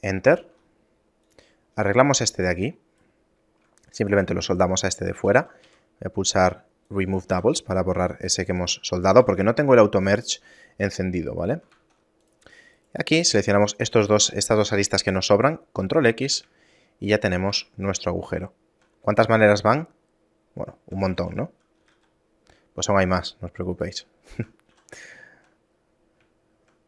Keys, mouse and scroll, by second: 0.5 ctrl+Tab, 1.9 middle click, 2.3-3.3 scroll up 6, 3.1 right click, 5.3 a, 5.5 a, 5.7 w, 7.4 a, 7.6 middle click, 8.0 scroll down 5, 8.7 right click, 9.2 a, 10.7 middle click, 11.5 scroll down 1, 11.8 ctrl+Tab, 12.9 right click, 13.6 shift+right click, 15.9 ctrl+x, 16.4 a, 16.8 shift+middle click, 17.6 Tab, 17.8-19.0 scroll down 8, 18.6 shift+middle click, 19.0 middle click, 19.6 shift+middle click, 21.2 a, 21.4 a, 21.9 g, 24.4 shift+middle click, 25.2 shift+middle click, 25.7 middle click, 26.5 shift+middle click.